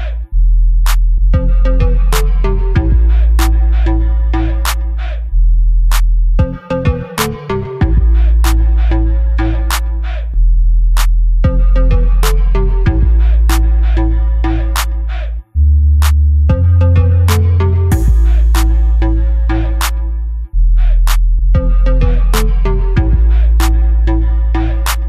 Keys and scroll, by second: 9.8 |, 11.4 b, 12.5 Return, 13.8 ctrl+z, 18.8 Delete.